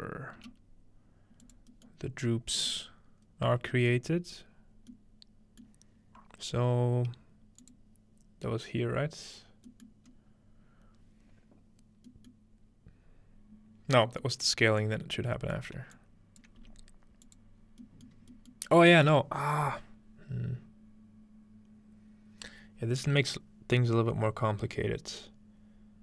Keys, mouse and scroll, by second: 0.4 g, 1.4 click, 2.1-3.0 scroll up 2, 2.8-4.9 middle drag, 3.0 scroll down 2, 3.6 scroll down 2, 4.1 scroll up 2, 4.6 scroll down 2, 5.7-7.6 middle drag, 7.6-8.9 drag, 9.7-12.1 middle drag, 10.1-12.1 scroll up 1, 12.9-15.5 scroll down 3, 14.8-18.4 drag, 16.6 g, 17.6-18.0 scroll down 1.